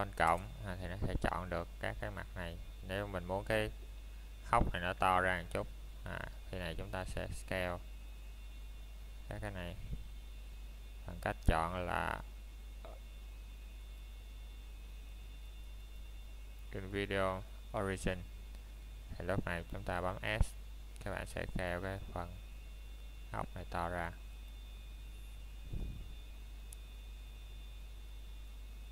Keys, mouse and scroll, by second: 1.9 scroll up 1, 2.1 alt+s, 4.8 click, 5.1 scroll down 1, 7.6 middle click, 7.7 scroll down 1, 8.1 middle click, 8.7 scroll up 1, 10.2 middle click, 12.2-13.2 scroll up 1, 13.2 middle click, 17.0 click, 20.8 middle click, 22.0 scroll up 1, 22.8 s, 27.0 click, 27.2 scroll down 1, 27.4 middle click, 27.9-28.3 scroll up 1.